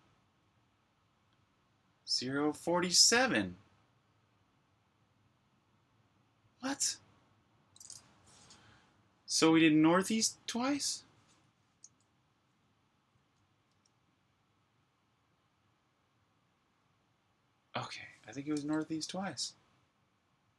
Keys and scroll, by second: 12.4 Up, 13.7 Return.